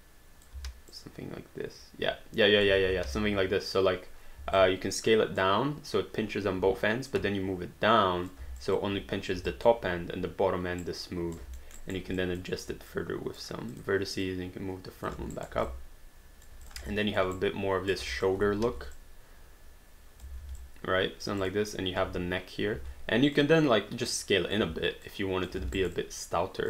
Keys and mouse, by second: 0.6 w, 0.9 click, 2.8 ctrl+z, 4.4 r, 5.2 click, 6.6 w, 7.2 click, 8.7 alt+click, 9.5 alt+click, 10.8 right click, 11.6 alt+middle click, 11.8 alt+right click, 12.2 click, 12.6 w, 12.9 click, 15.4 alt+right click, 15.6 alt+d, 15.8 alt+click, 16.7 click, 17.0 alt+click, 17.4 right click, 18.1 alt+click, 18.6 r, 19.0 click, 20.4 alt+d, 20.7 alt+click, 21.4 click, 22.8 r, 23.4 click, 24.6 w, 25.1 click, 25.8 alt+right click, 26.1 alt+click.